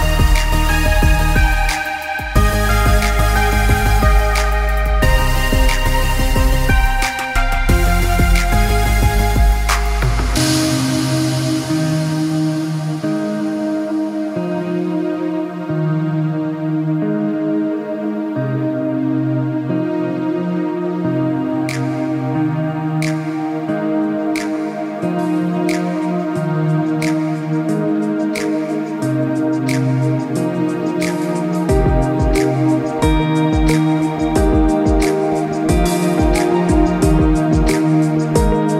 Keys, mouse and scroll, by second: 0.3 scroll down 4, 0.6 middle click, 1.4 s, 2.4 g, 3.5 click, 3.8 middle click, 5.5-5.8 scroll up 4, 5.8 middle click, 7.1 middle click, 8.0 click, 10.9-11.7 scroll down 5, 11.2 middle click, 11.7-12.6 scroll up 3, 12.6 click, 14.7 click, 15.6 click, 15.9 middle click, 16.0 middle click, 16.3 scroll down 3, 16.5 middle click, 16.9 click, 17.5 g, 18.6 click, 18.8 middle click, 19.3-19.9 scroll up 4, 19.8 click, 20.2 middle click, 20.6 middle click, 21.1 click, 21.4 middle click, 21.8 middle click, 22.2 g, 24.0 shift+d, 25.5 shift+d, 26.7 shift+d, 27.9 shift+d, 29.3 shift+d, 30.2 middle click, 31.4 shift+d, 32.6 shift+d, 34.4 middle click, 35.9 shift+d, 37.2 middle click.